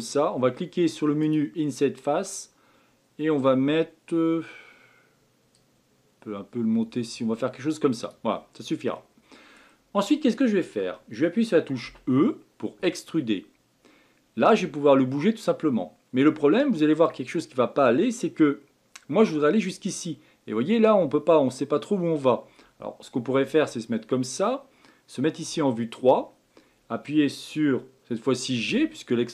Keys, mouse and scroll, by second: 1.2-4.3 drag, 5.5-8.5 drag, 8.9-11.8 middle drag, 11.8 e, 25.4 KP_3, 28.6 g.